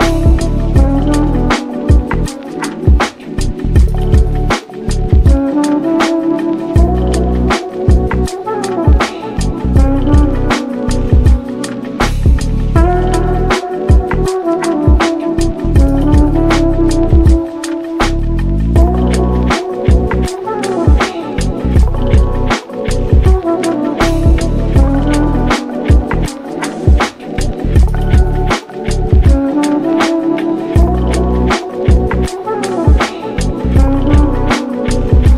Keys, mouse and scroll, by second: 0.0 Tab, 0.6-1.1 drag, 1.1 Tab, 1.4 3, 1.6 click, 1.8-3.3 middle drag, 3.3 shift+click, 3.5 middle click, 3.9-5.1 shift+scroll up 2, 4.0 shift+middle click, 5.1 i, 7.1 scroll up 1, 7.1-8.5 middle drag, 8.5 h, 9.0 ctrl+z, 9.5 g, 12.1 alt+e, 13.9 Tab, 14.1 click, 14.6 scroll down 1, 14.9-15.9 middle drag, 15.9-16.3 scroll up 1, 16.3-16.8 middle drag, 16.8 click, 17.5 /, 17.9 Tab, 18.7 middle click, 19.1 i, 20.9 i, 22.5-23.5 middle drag, 23.5-23.8 scroll up 3, 23.8-24.3 shift+middle drag, 24.3 click, 24.6 shift+click, 24.8 shift+click, 25.0-25.8 scroll down 3, 25.8 alt+e, 26.9 Tab, 27.1 drag, 27.3-28.1 middle drag, 28.1 /, 28.4-28.7 scroll down 2, 28.7-29.6 middle drag, 29.6 ctrl+s, 30.3-31.7 middle drag, 31.7-32.2 scroll up 2, 32.2-34.4 middle drag, 34.6-35.3 drag.